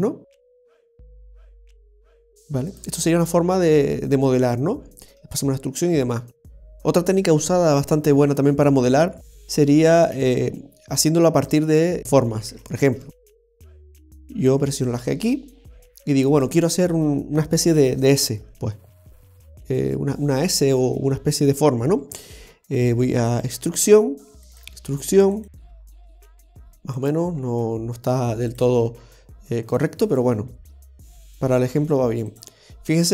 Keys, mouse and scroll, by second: 0.8 g, 2.0 right click, 2.3 g, 10.2 shift+a, 12.5 Tab, 13.2 right click, 13.7 shift+right click, 14.5 g, 24.6 e, 27.3 e, 28.9 e.